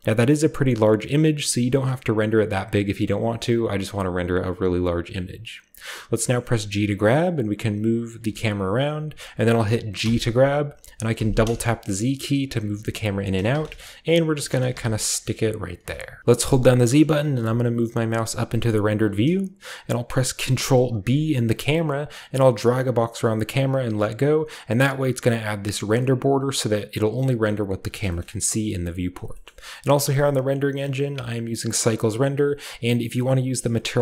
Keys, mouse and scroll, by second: 4.4 click, 6.4 g, 9.0 shift+click, 9.9 g, 11.1 z, 11.2 z, 13.2 shift+click, 13.5-17.1 typing, 14.3 shift+click, 14.6-16.2 shift+drag, 18.8-20.4 scroll down 1, 21.0 ctrl+b, 22.0-23.8 drag, 28.0 shift+middle click, 28.2-29.3 shift+middle drag, 28.2-28.7 shift+scroll down 2, 28.7 shift+scroll up 2, 29.4-34.0 shift+middle drag, 30.3 shift+click.